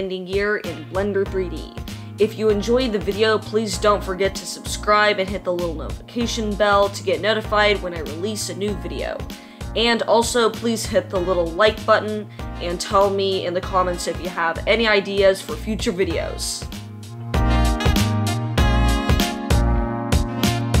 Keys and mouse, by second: 2.5-7.8 typing, 3.2 Tab, 4.6 middle click, 5.1-8.1 drag, 7.0 Tab, 8.5-9.3 middle drag, 9.2 Tab, 9.3 click, 9.4-12.1 middle drag, 9.7-11.8 typing, 12.0 ctrl+z, 12.9 e, 13.4 s, 13.9 e, 14.4 g, 14.8 Tab, 15.5 r, 17.4 middle click, 18.0 Tab, 18.1 click, 18.2 middle click, 18.3 g, 18.7 click, 18.7 3, 18.9 Tab, 18.9-20.8 middle drag, 19.2 g, 19.5 r.